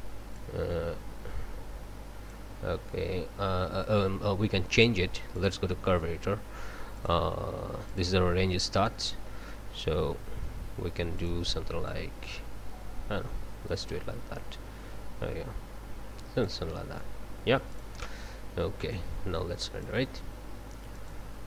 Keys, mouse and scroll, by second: 0.4-2.5 drag, 5.3 click, 6.9 click, 7.9 click, 8.8-9.5 drag, 11.2 click, 11.9-16.7 drag, 17.7 click, 18.9-20.0 drag, 20.9 click.